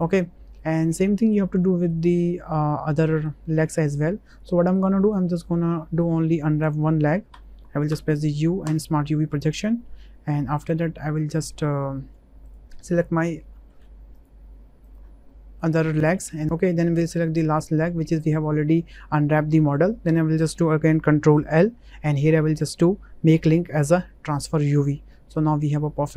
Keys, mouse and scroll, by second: 0.0 Tab, 0.0 click, 0.5 middle drag, 1.6 middle drag, 2.1 shift+drag, 2.4-3.2 middle drag, 3.6 click, 4.4 right click, 4.6 click, 5.0 shift+click, 5.8 shift+middle click, 6.6 Tab, 7.3 a, 7.9 u, 11.1 Tab, 12.5 drag, 13.0 shift+drag, 14.1 shift+click, 14.9 shift+click, 15.3 middle click, 16.0 shift+click, 16.3 middle click, 21.4 ctrl+l, 25.4-26.0 middle drag.